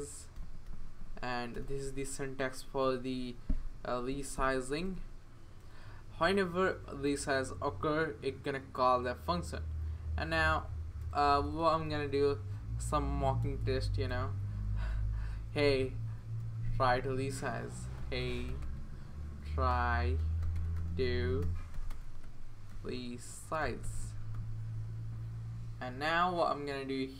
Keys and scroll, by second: 1.5 Return, 3.0 Right, 3.5 Right, 4.1 Left, 4.6 BackSpace, 4.8 BackSpace, 5.6 BackSpace, 11.0-12.3 typing, 13.4 BackSpace, 13.6 BackSpace, 14.1 BackSpace, 15.6 typing, 16.6-24.8 typing.